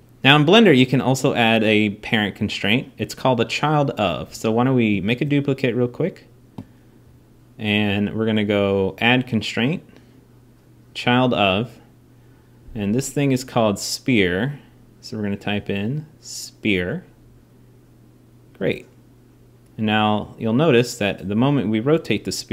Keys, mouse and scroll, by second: 0.0 x, 4.8 shift+d, 12.9-15.0 drag, 15.9-18.5 drag, 19.6 r, 20.8-22.5 drag, 21.1 r.